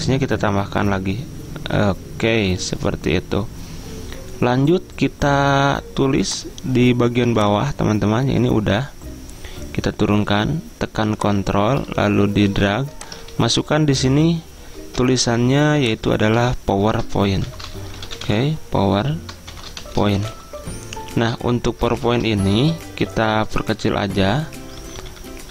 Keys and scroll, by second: 13.4 ctrl+s, 15.1 Escape, 16.4 ctrl+a, 17.3-20.9 typing, 22.1 ctrl+a, 24.3 ctrl+[, 24.9 ctrl+[, 25.0 ctrl+[, 25.3 ctrl+[.